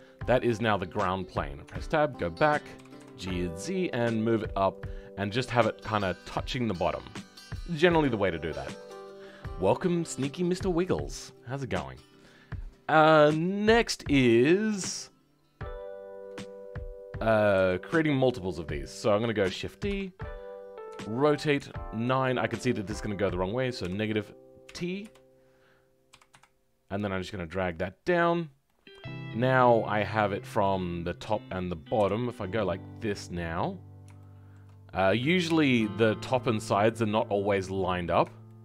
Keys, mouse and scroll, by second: 0.0 middle click, 1.6-8.2 middle drag, 17.5-30.6 middle drag, 17.5 KP_1, 30.6 click, 34.1-38.6 shift+middle drag.